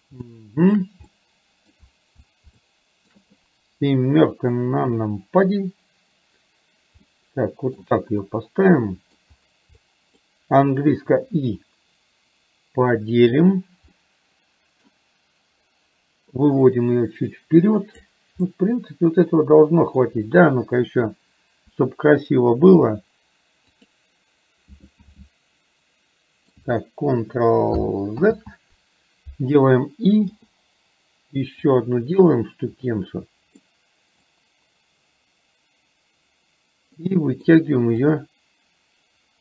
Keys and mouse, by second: 0.3 shift+middle click, 1.2 middle click, 2.7 shift+middle click, 4.9 KP_7, 7.2 middle click, 8.3-9.3 middle drag, 9.9 middle click, 14.0 middle click, 16.7-18.2 drag, 18.5-20.2 middle drag, 25.2-26.7 middle drag, 28.3 ctrl+z, 30.4 i, 33.7 middle click, 37.2 middle click, 38.2-39.4 drag.